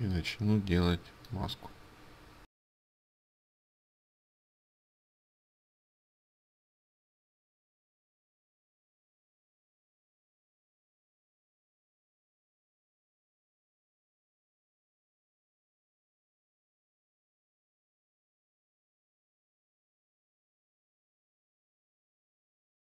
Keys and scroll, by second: 13.2 ctrl+alt+z, 13.2 ctrl+alt+z, 13.9 ctrl+z, 19.9 ctrl+z.